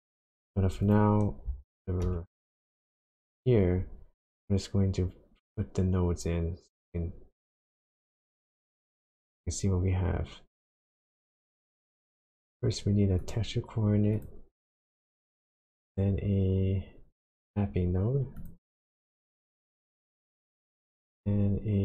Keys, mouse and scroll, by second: 0.8 click, 2.0 shift+a, 14.7 click, 15.1 shift+a, 19.7 click, 20.3 shift+a.